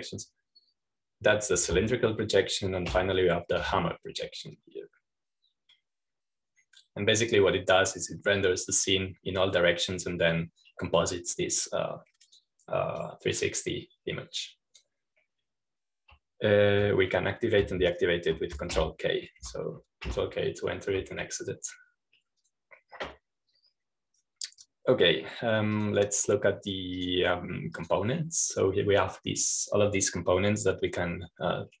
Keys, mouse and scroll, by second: 0.5 ctrl+shift+k, 4.8 ctrl+shift+k, 6.5-12.2 drag, 12.2-12.5 scroll down 1, 13.0-17.3 drag, 20.6 ctrl+k, 21.3 ctrl+k, 22.0 ctrl+k, 24.3 click, 27.7-31.8 drag.